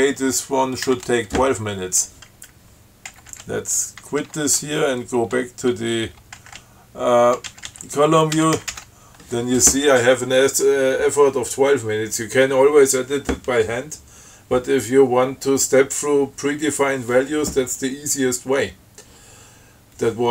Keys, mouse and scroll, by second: 1.2 2, 3.4 Up, 4.5 q, 6.7 ctrl+Up, 8.2 ctrl+Up, 8.7 ctrl+c, 8.8 ctrl+x, 9.0 ctrl+c.